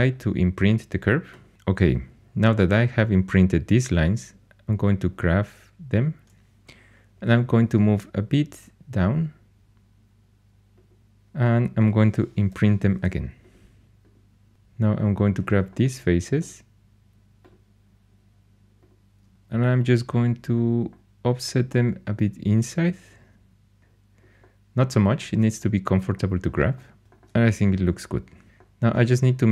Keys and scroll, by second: 6.9-7.7 typing, 14.5 3.